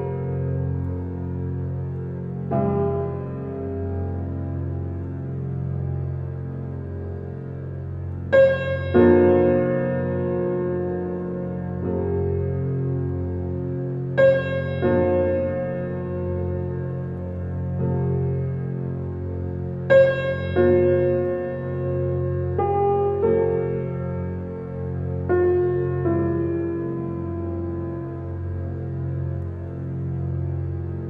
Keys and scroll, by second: 19.4 ctrl+d.